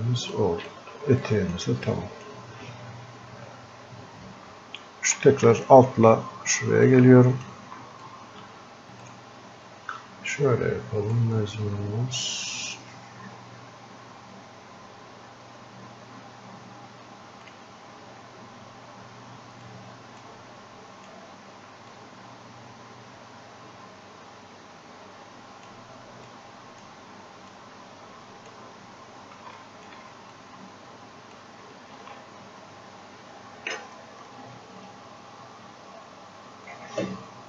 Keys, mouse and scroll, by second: 0.4 click, 0.7 shift+click, 1.9-4.1 drag, 5.4 click, 6.9 click, 8.1 click, 9.1-16.0 drag, 12.5 typing, 17.5 click, 19.6 right click, 20.3-21.9 drag, 21.9-26.3 drag, 26.3 click, 27.5-29.6 drag, 30.4-32.0 drag, 32.0 ctrl+z, 34.3 click.